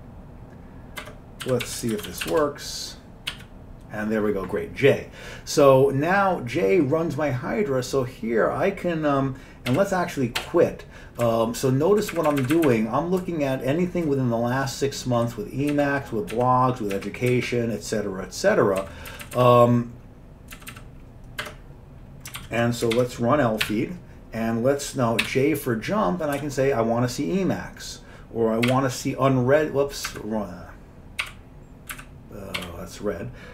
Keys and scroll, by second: 1.1 Escape, 1.3-3.4 typing, 9.8 q, 10.5 q, 11.3 Up, 11.9 Up, 12.2 typing, 12.5 Up, 12.6 Up, 12.8 Up, 13.3-14.2 Right, 13.3 typing, 15.8 Down, 16.4 Down, 17.1 Down, 17.4 Down, 18.9 Down, 19.4 Down, 19.5 Down, 20.8 Down, 20.8 typing, 21.5 Escape, 22.5 ctrl+g, 23.1 ctrl+1, 23.8 e, 25.4 j, 26.5 e, 28.8 u, 30.2 Up, 30.2 typing, 31.3 u, 32.0 Up, 32.7 r.